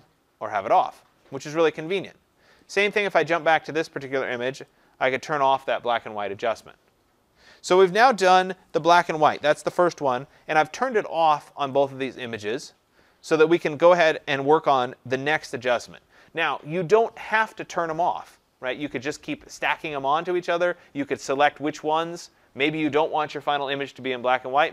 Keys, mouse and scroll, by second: 11.7 click, 12.5 click.